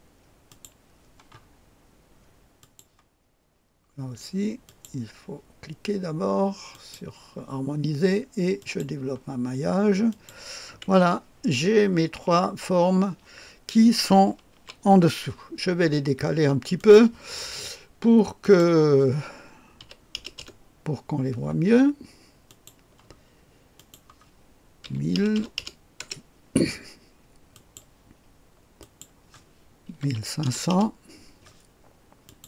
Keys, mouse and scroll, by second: 0.4 click, 1.3-2.2 scroll down 1, 2.6 click, 4.6 click, 6.7 click, 8.5-9.5 drag, 10.1 click, 10.9 Delete, 11.4-12.1 scroll down 1, 14.5 KP_2, 16.7 click, 18.4 click, 19.8 KP_5, 20.1 KP_0, 20.5 KP_0, 22.4 click, 23.7 click, 24.8 KP_1, 25.1 KP_0, 25.3 KP_0, 26.0 Return, 27.5 click, 28.8 click, 29.9 KP_1, 30.1 KP_5, 30.4 KP_0, 32.2 click.